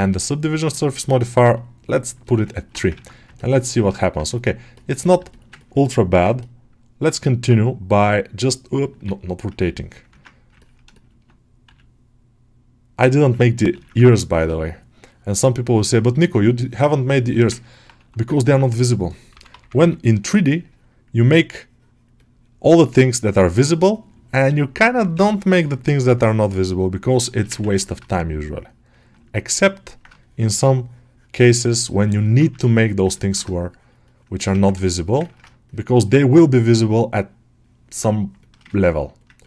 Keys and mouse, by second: 0.7 click, 1.4 click, 2.1 alt+middle click, 2.4 ctrl+alt+middle click, 2.9 ctrl+Tab, 3.2 alt+middle click, 3.5 ctrl+alt+middle click, 3.8 alt+shift+middle click, 5.1 middle click, 5.4 ctrl+alt+middle click, 10.1 ctrl+Tab, 10.4 ctrl+alt+middle click, 10.8 alt+shift+middle click, 13.9 ctrl+r, 14.0 ctrl+alt+middle click, 14.6-16.2 shift+drag, 16.8 shift+click, 17.2 alt+shift+middle click, 17.6 alt+middle click, 18.2 ctrl+alt+middle click, 20.0-23.8 drag, 24.0-27.0 drag, 27.2 alt+shift+middle click, 27.4 ctrl+middle click, 27.9-29.0 shift+drag, 29.2 alt+middle click, 30.1-31.9 shift+drag, 32.1 alt+shift+middle click, 32.6 click, 33.0 ctrl+alt+middle click, 33.3 shift+click, 33.9 click, 34.2 alt+shift+middle click, 34.5 ctrl+middle click, 34.7 alt+shift+middle click, 35.9-38.2 shift+drag, 38.3 alt+shift+middle click, 38.6 ctrl+alt+middle click, 39.3 ctrl+alt+middle click.